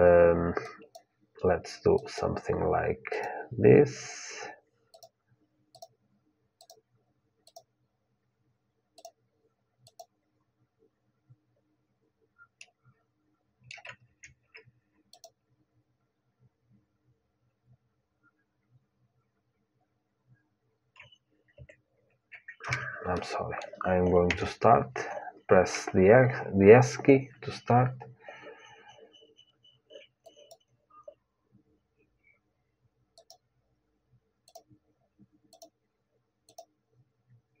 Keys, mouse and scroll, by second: 0.4-2.4 drag, 12.3-14.3 middle drag, 22.9-24.9 middle drag, 24.0 KP_1, 30.0-32.9 drag.